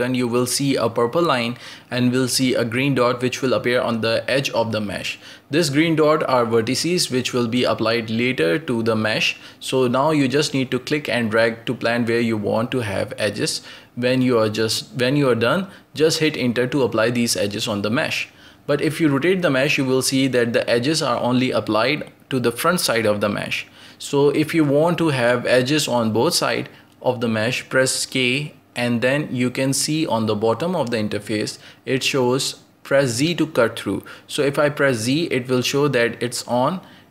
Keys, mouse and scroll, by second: 1.2-4.2 drag, 15.8-21.8 middle drag, 23.9 ctrl+z, 24.8-26.3 shift+middle drag, 26.3-37.1 drag.